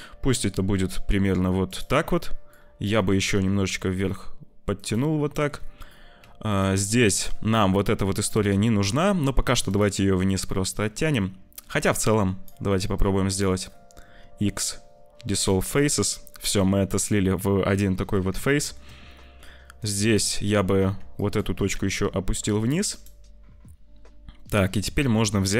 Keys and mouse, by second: 2.6 click, 3.0 g, 5.3 shift+click, 6.1 1, 6.4 click, 8.2 g, 10.7 shift+click, 11.5 3, 11.8 click, 12.9 click, 14.0 x, 18.5 shift+middle click, 19.8 click, 20.8 1, 21.1 click, 21.5 g, 25.2 click.